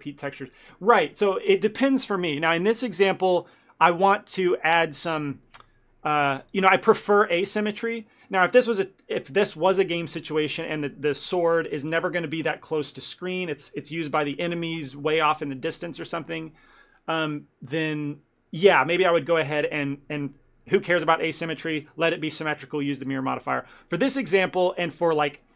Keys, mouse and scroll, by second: 2.9-3.3 scroll down 4, 4.1 middle click, 4.1 scroll down 2, 4.6 middle click, 5.1 middle click, 5.4 middle click, 5.8 shift+middle click, 24.9 middle click.